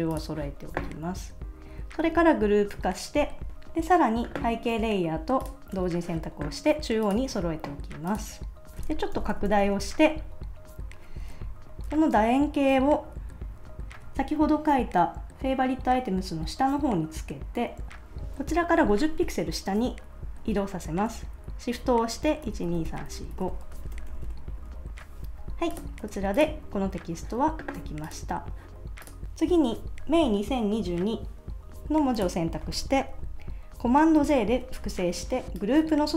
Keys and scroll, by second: 2.6 super+g, 9.1 shift+super+;, 12.9 shift+Up, 15.8 Up, 22.4 shift+Down, 23.9 super+-, 26.0 super+s, 34.2 super+j.